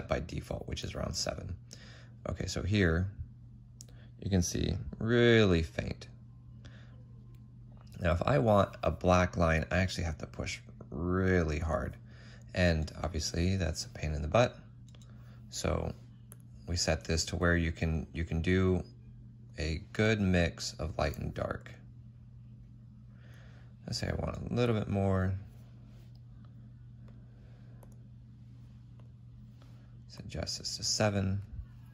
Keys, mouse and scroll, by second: 12.5 ctrl+z, 24.0 ctrl+z.